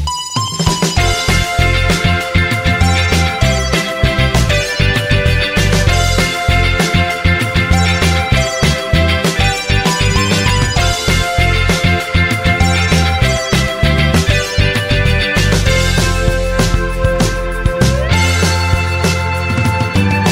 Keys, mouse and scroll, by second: 6.2 typing, 9.7 typing, 16.9 1, 20.1-20.3 typing.